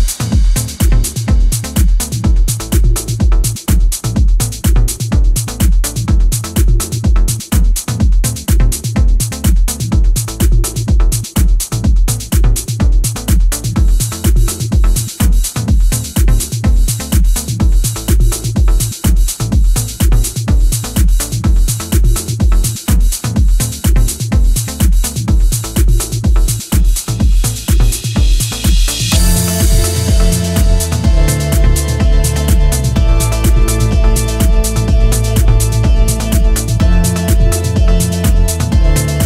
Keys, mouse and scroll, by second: 0.0 click, 0.5 e, 5.8 click, 5.9 e, 8.8 r, 11.1 r, 12.0 g, 14.1 1, 14.4 click, 14.9 g, 16.5 click, 16.7 g, 18.2 click, 18.8 g, 19.1 click, 19.2 g, 20.0 g, 20.6 click, 20.7 g, 22.5 click, 22.6 g, 24.7 click, 24.9 g, 25.7 click, 25.8 g, 27.0 click, 27.1 g, 28.2 click, 28.2 g, 29.0 click, 29.2 g, 30.7 click, 32.2 g, 32.7 click, 32.8 g, 35.5 click, 35.7 g, 36.4 click, 36.6 g, 37.7 click, 37.8 g.